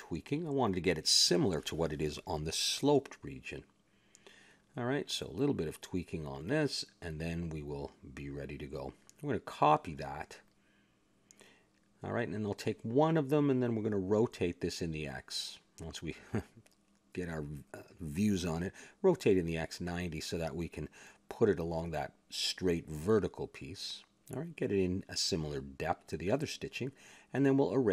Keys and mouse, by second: 0.4-2.2 middle drag, 3.0-5.2 drag, 4.3 middle click, 6.4-7.7 drag, 7.1 middle click, 8.0-9.1 drag, 8.4-12.1 middle drag, 12.1 shift+d, 12.9 click, 13.8 middle click, 13.9 click, 14.5 middle click, 15.1 ctrl+KP_3, 15.8 KP_Decimal, 16.5 middle click, 17.1 click, 18.8 KP_Decimal, 19.7 r, 21.0 click, 22.2 click, 24.4 click, 25.3-27.7 middle drag.